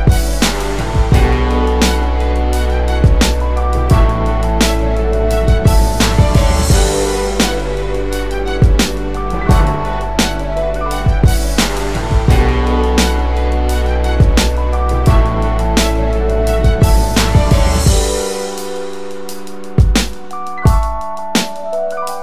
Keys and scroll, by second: 16.1 space.